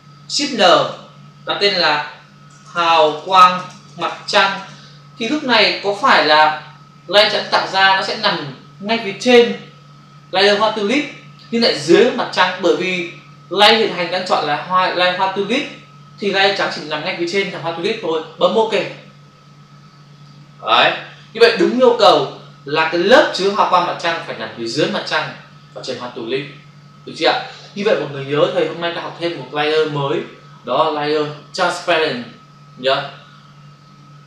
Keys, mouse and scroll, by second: 0.5 ctrl+shift+n, 1.8-4.8 typing, 20.1 click.